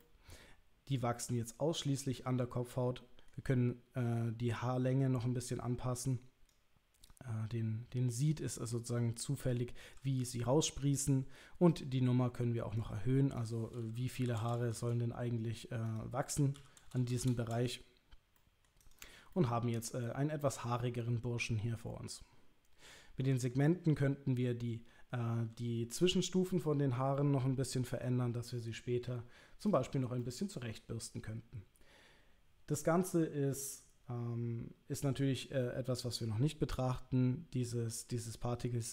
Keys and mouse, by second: 0.0-3.3 middle drag, 4.6-6.5 drag, 7.1-8.2 drag, 8.7-10.0 drag, 11.7-12.8 drag, 13.4-15.2 drag, 14.6 KP_0, 15.9-18.0 drag, 17.0 KP_0, 18.4-18.7 middle drag, 18.8 click, 19.3-22.1 middle drag, 29.7 click, 30.2-30.7 middle drag.